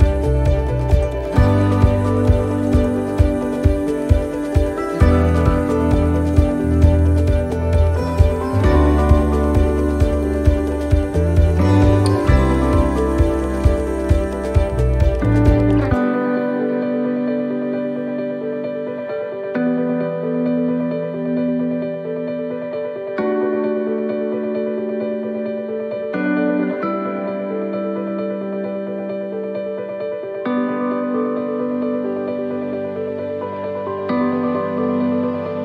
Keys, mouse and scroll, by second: 5.3 l, 7.5 middle click, 8.1 click, 10.4 middle click, 12.4 click, 16.7 middle click, 17.2-17.6 scroll down 1, 17.6 middle click, 18.6 shift+middle click, 18.8 shift+middle click, 19.0-19.6 scroll up 2, 19.3 middle click, 19.9 scroll down 1, 20.2 middle click, 22.0 click, 23.2 shift+d, 23.9 middle click, 24.9 click, 27.5 middle click, 28.1 shift+d, 29.3 click, 32.6 middle click, 33.5 click.